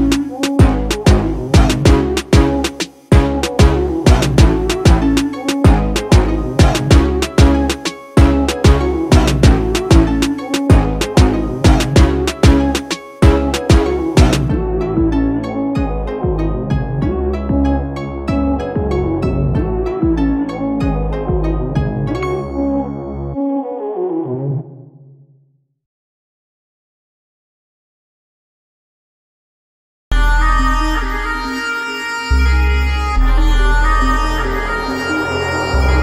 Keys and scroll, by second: 6.2 ctrl+-, 6.7 ctrl+shift+-, 34.2 ctrl+z.